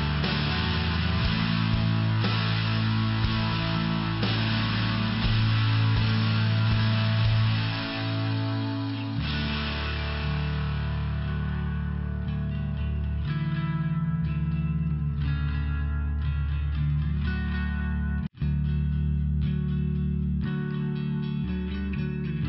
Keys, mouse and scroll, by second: 1.7 click, 2.9 click, 4.3 click, 5.9 click, 9.7 click, 10.0 click, 10.3 click, 10.7 click, 11.0 click, 13.2 click, 13.4 click, 16.3 click, 17.5 click, 19.6 click.